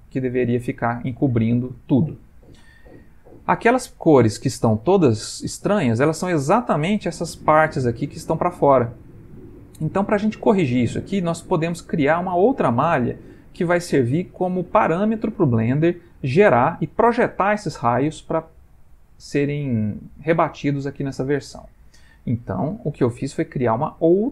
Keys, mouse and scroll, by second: 2.1 ctrl+middle click, 5.2 ctrl+middle click, 9.4 ctrl+middle click, 11.2 shift+middle click, 13.1 ctrl+middle click.